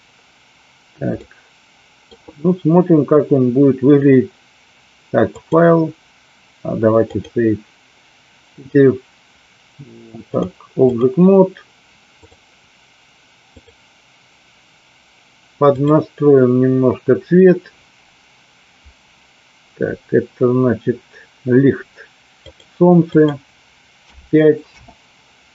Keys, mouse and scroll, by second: 1.2-2.1 middle drag, 5.4-7.2 drag, 8.5 click, 10.2 click, 12.3 click, 13.6 click, 22.5 click, 23.0-24.8 drag.